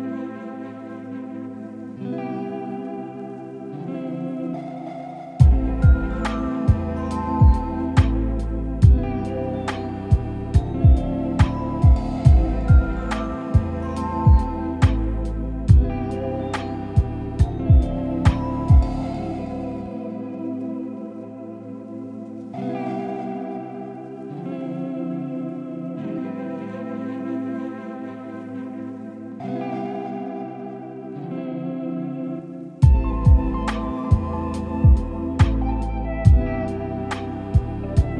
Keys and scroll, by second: 1.7 ctrl+l.